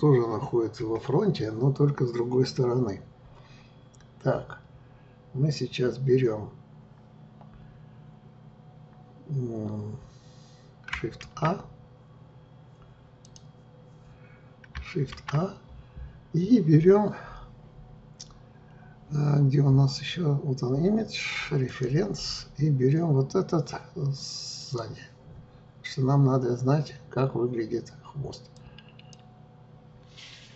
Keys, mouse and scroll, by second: 11.2 shift+a, 13.2 click, 15.1 shift+a.